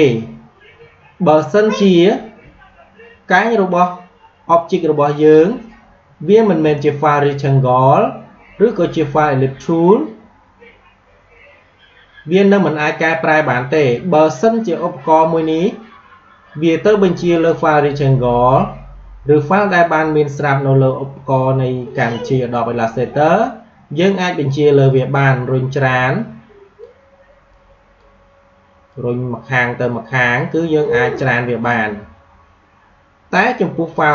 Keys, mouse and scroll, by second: 5.0 click, 12.8-17.2 drag, 23.8-33.8 drag.